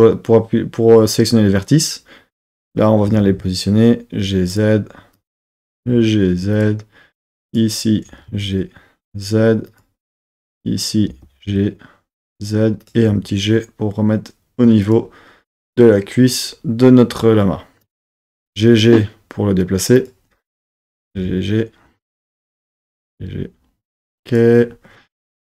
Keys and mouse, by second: 1.6 click, 3.0 g, 3.4 z, 4.5 click, 5.2 click, 5.6 g, 5.8 z, 6.6 click, 7.4 click, 8.1 g, 8.3 z, 9.7 click, 11.1 click, 11.1 g, 11.5 z, 12.8 click, 13.1 g, 14.8 click, 18.0 click, 18.3 g, 18.4 g, 20.0 click, 20.8 click, 21.0 g, 21.1 g, 22.0 click, 22.3 super+z, 22.6 click, 22.9 g, 23.0 g, 24.3 click.